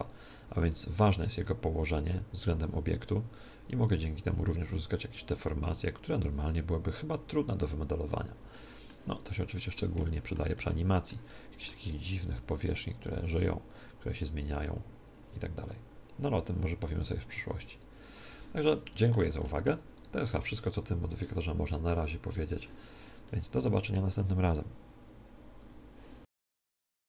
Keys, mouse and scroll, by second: 2.7 r, 8.1 click, 8.5-13.0 middle drag, 12.1 r, 17.7-18.8 drag, 18.8-21.2 middle drag, 19.9 right click, 23.2-25.0 middle drag.